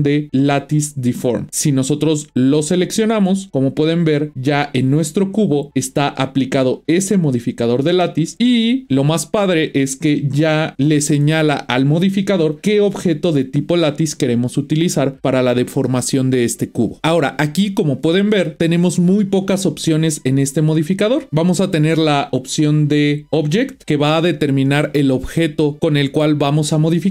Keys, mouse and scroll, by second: 3.8 click.